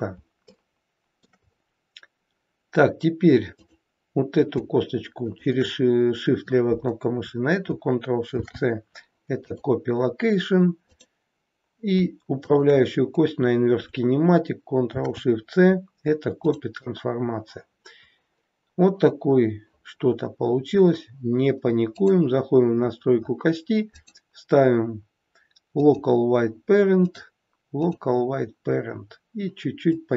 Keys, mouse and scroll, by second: 0.4 shift+middle click, 3.4 click, 5.1 shift+click, 8.2 ctrl+shift+c, 10.8 click, 12.3 shift+click, 14.8 ctrl+shift+c, 21.9 click, 22.7-23.8 scroll down 11, 23.8 click, 29.8 click.